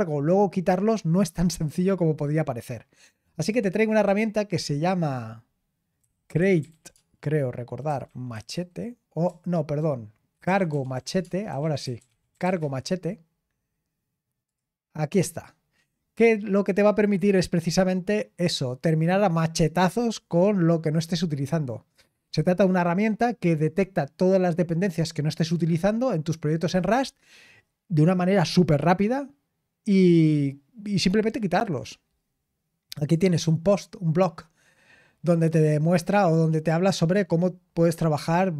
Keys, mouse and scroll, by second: 3.3-5.2 drag, 7.1-7.8 typing, 11.3-12.9 typing, 14.4 click, 14.4 typing, 17.2-17.5 scroll down 2, 33.0 click, 36.3-37.0 scroll down 1, 37.3-38.5 scroll down 4.